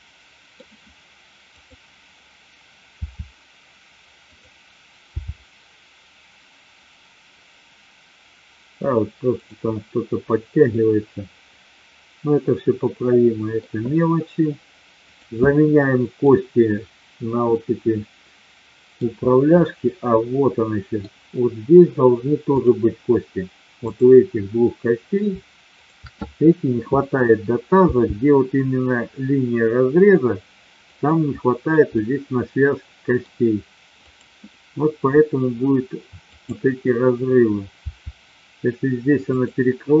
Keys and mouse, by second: 1.6-2.5 drag, 2.9 r, 4.9 g, 9.3 click, 10.7-13.6 middle drag, 14.9 click, 15.7-16.2 middle drag, 17.6-18.9 middle drag, 19.5-20.9 middle drag, 23.8-24.7 drag, 25.8-26.7 shift+drag, 27.8 g, 30.9 click, 31.8-33.2 middle drag, 34.1-34.9 drag, 36.3-37.2 drag, 37.8 r, 39.6-40.0 middle drag.